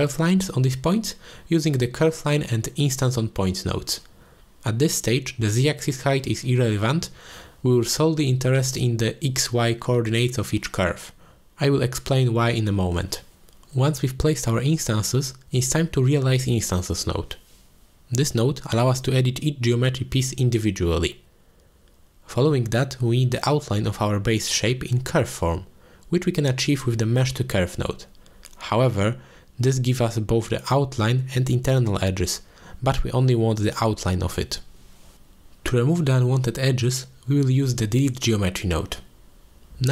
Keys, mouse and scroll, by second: 5.0 middle click, 8.1-9.4 drag, 9.7 drag, 10.3-10.8 middle drag, 16.0 middle click, 16.2 click, 16.8 click, 17.7 click, 18.7 middle click, 19.2-19.6 drag, 19.8 shift+a, 23.4 click, 25.6 middle click, 25.8 alt+shift+click, 26.5 click, 27.0 middle drag, 27.8-31.3 drag, 28.8 e, 32.6 middle click, 34.7 drag, 35.1 click, 35.8 click, 36.4 click, 37.1 shift+a, 37.2 ctrl+z, 38.8 shift+a.